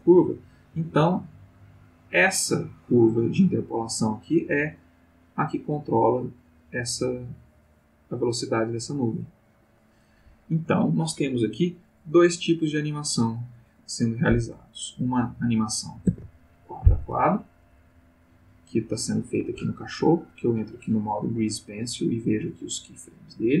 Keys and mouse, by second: 1.2-9.9 drag, 16.1 ctrl+Tab, 18.1 click, 20.1 click, 21.7 click, 22.5-23.6 drag.